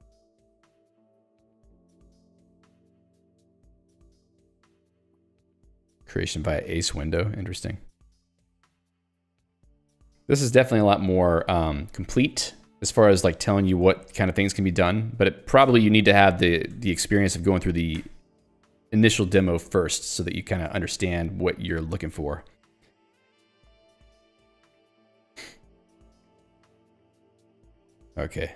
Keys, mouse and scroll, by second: 5.4 ctrl+u, 6.1 ctrl+d, 12.5 ctrl+e, 13.3 ctrl+g, 13.7 ctrl+d, 15.7 ctrl+u, 16.2 ctrl+d, 18.0 ctrl+u, 19.0 ctrl+d, 27.0 ctrl+u.